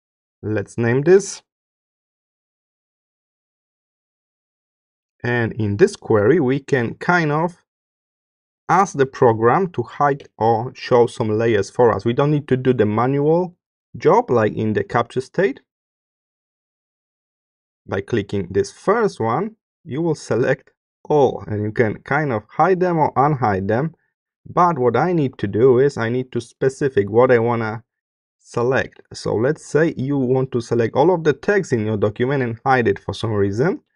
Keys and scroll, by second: 1.4-2.5 typing.